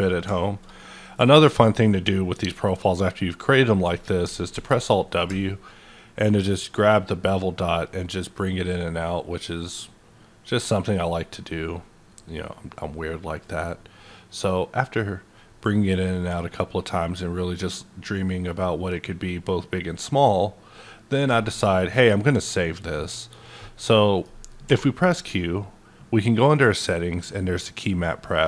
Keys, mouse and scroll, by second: 0.4-1.9 shift+middle drag, 1.9-4.5 middle drag, 4.5 w, 4.9 middle click, 6.5-24.6 ctrl+drag, 23.8-26.8 middle drag, 24.6 q.